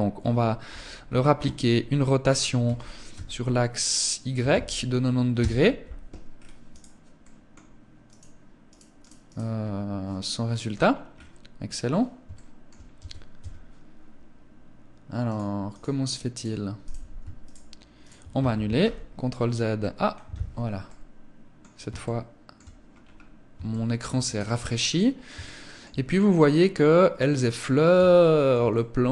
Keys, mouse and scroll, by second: 0.1 KP_1, 1.9 r, 5.7-6.3 scroll down 3, 6.1 right click, 6.5 middle click, 7.4 right click, 8.0 right click, 8.5 right click, 8.9 scroll up 2, 10.2-10.7 scroll up 5, 11.7 shift+middle click, 12.7 Tab, 14.6 click, 15.1 click, 15.7 right click, 16.1 right click, 16.7 shift+right click, 17.3 right click, 18.1 ctrl+z, 20.1 middle click, 21.3 shift+middle click, 22.2 scroll down 1, 22.3 scroll up 3, 23.0 shift+middle click, 23.6 right click, 24.2-24.6 scroll up 2, 24.7 shift+middle click, 25.3 scroll up 2, 25.5 scroll down 1, 26.5 middle click, 28.0 middle click.